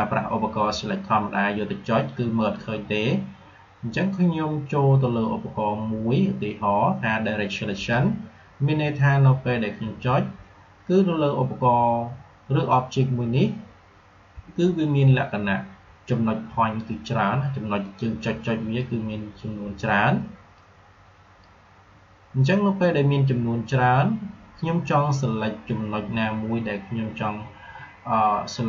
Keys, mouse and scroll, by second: 2.3 click, 7.6 click, 17.7-20.4 drag, 20.7-23.7 drag.